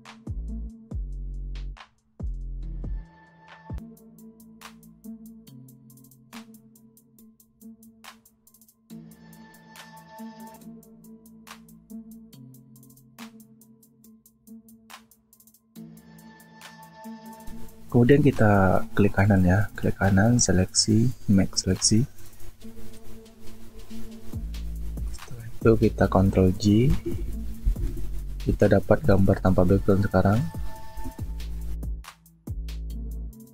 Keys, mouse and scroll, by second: 3.7 alt+click, 6.7 alt+click, 7.1 alt+scroll down 1, 9.0 alt+scroll down 1, 27.6 ctrl+j, 31.0 alt+scroll down 1, 31.3 alt+scroll up 1, 32.1 space.